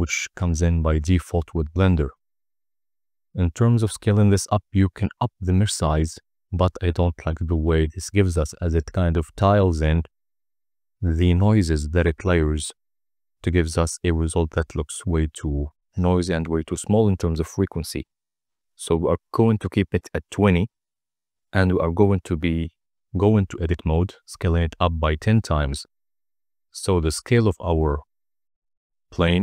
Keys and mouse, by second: 2.3-4.7 drag, 3.7 0, 8.9-14.4 drag, 16.7 click, 18.1-22.2 drag, 22.8 Tab, 23.9 a, 24.3 s, 25.1 1, 25.5 0, 25.8 Return, 26.7 Tab, 28.3-29.2 middle drag.